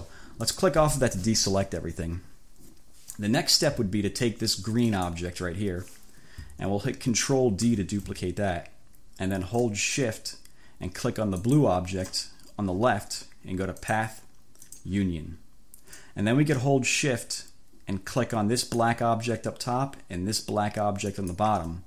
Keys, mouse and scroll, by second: 0.6 click, 4.9 click, 7.7 ctrl+d, 11.4 shift+click, 13.8 click, 14.7 click, 18.6 shift+click, 21.1 shift+click.